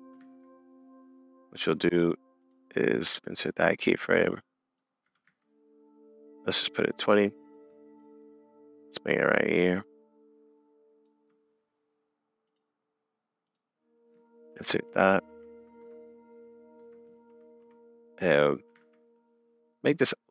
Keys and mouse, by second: 0.2 super+z, 4.1 click, 4.4 click, 5.0 g, 8.0-11.1 shift+drag, 14.5 shift+Left, 14.9 shift+Right, 15.3 shift+Left, 15.8 space, 16.8 space, 17.1 shift+Left, 18.8 super+s, 19.1-20.3 middle drag.